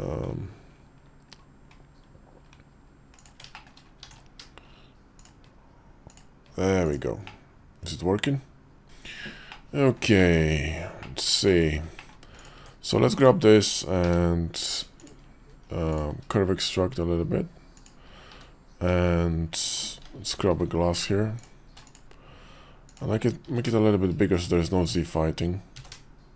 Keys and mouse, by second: 3.4 shift+click, 4.0 alt+x, 5.1-6.1 drag, 6.7 click, 7.1-8.8 middle drag, 9.4 middle click, 10.1 shift+middle click, 10.9 middle click, 11.4 shift+middle click, 11.8 middle click, 12.2 click, 12.4 Tab, 13.9 q, 18.2 q, 20.4 alt+m, 21.7 click, 22.7 click, 23.3 a, 24.2 right click, 24.7 click, 25.6 s.